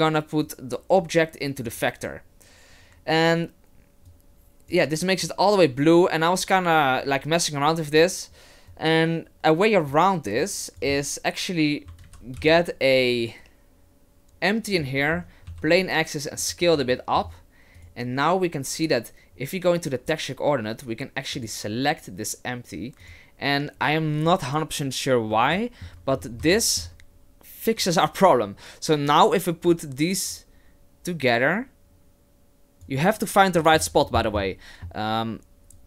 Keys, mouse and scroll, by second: 0.4 click, 4.1 click, 5.2 click, 8.7 click, 10.4 click, 12.0 shift+c, 12.3 shift+a, 15.1-15.5 scroll up 4, 15.5 s, 16.9 shift+middle click, 17.8 right click, 21.3 click, 25.5 shift+middle click, 26.0-26.6 scroll up 6, 26.6 shift+middle click, 27.8 click, 30.3 click, 33.6 middle click, 33.8 scroll down 1, 34.0-34.5 scroll up 11, 34.4 middle click, 35.7 click.